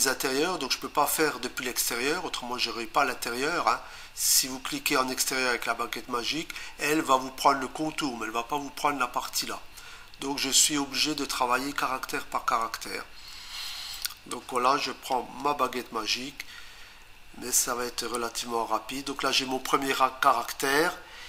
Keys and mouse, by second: 14.0 click, 15.4 Return, 18.1 click.